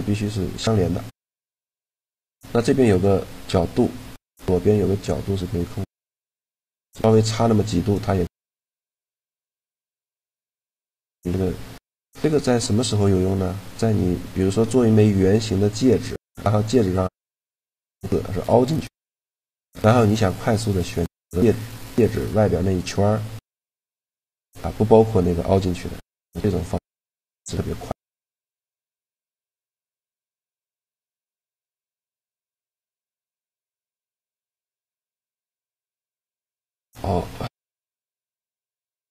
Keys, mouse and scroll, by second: 0.7-3.2 middle drag, 4.7-6.5 drag, 7.9-9.6 middle drag, 11.1-15.3 middle drag, 15.3-17.4 scroll up 1, 17.4-21.1 drag, 21.8-23.4 middle drag, 25.6 middle click, 29.9 a, 33.8 Tab, 35.5 shift+a, 36.7 Tab, 37.2 click, 37.9-39.1 right drag.